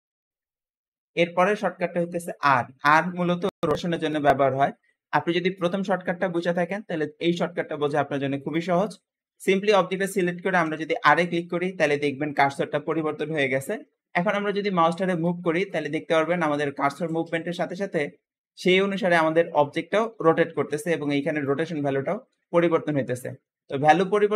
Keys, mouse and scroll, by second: 10.5 r.